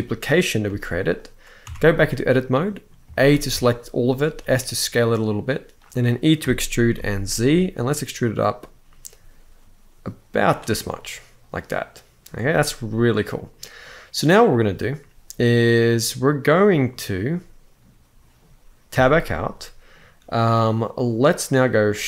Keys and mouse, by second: 0.4 g, 0.9-1.3 right drag, 1.4 Tab, 1.7 middle click, 2.9 shift+middle click, 3.2 a, 4.0 s, 5.6 click, 6.1 e, 6.7 z, 7.2 z, 10.2 click, 10.5-11.9 middle drag, 12.8 middle click, 16.5-18.0 middle drag, 18.6 Tab, 19.0-19.6 middle drag, 21.4 middle click.